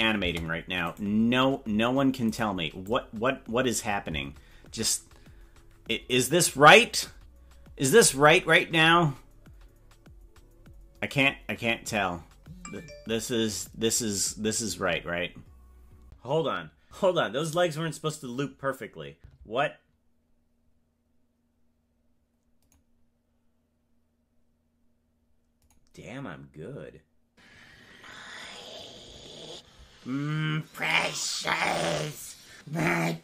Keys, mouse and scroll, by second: 0.3 space, 0.9 right click, 2.3 right click, 4.6 space, 14.3-16.1 drag.